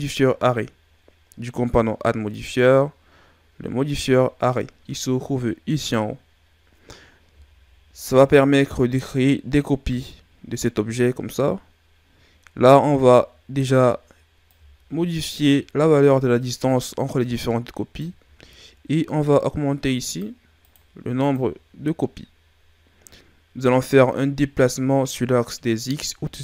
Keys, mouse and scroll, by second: 2.3 click, 6.8 scroll up 3, 7.5-8.1 shift+scroll up 4, 14.4 click, 20.0-24.2 drag.